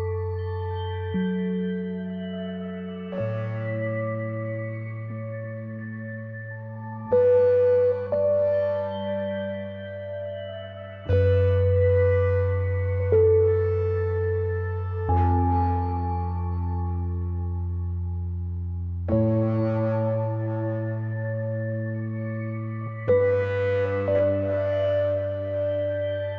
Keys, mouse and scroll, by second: 1.2 click, 3.1 v, 3.3 click, 5.3 scroll up 1, 8.6 click, 9.0-9.3 ctrl+scroll down 1, 9.7 ctrl+scroll up 1, 10.8 click, 14.8 Left, 16.1-16.4 ctrl+scroll down 1, 16.4 click, 16.7 z, 16.9 click, 17.9-19.4 drag, 19.4 Delete, 19.6 r, 20.3-23.6 drag.